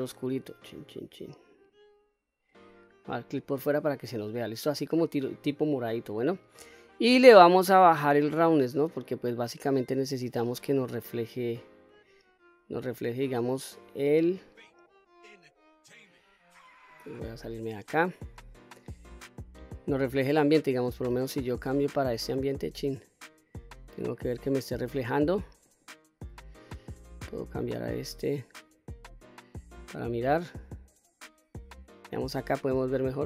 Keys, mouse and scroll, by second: 3.0 click, 5.1-6.6 scroll down 5, 6.6-7.9 scroll down 2, 7.9-10.4 drag, 10.6-12.0 middle drag, 13.3 click, 17.1 Tab, 19.7-23.6 drag, 25.8-31.6 drag.